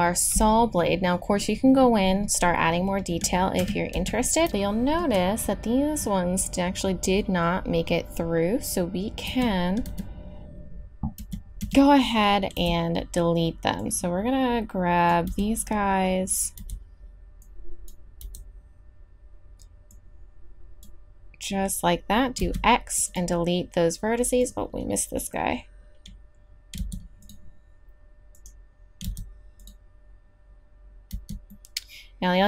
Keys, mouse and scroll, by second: 3.6 KP_3, 3.9 z, 9.2 z, 9.8 z, 11.2 a, 11.6 a, 12.5 b, 15.3 b, 16.6 b, 18.2 b, 22.4 x, 24.4-25.9 drag, 26.7 x, 29.0 x, 31.1 z.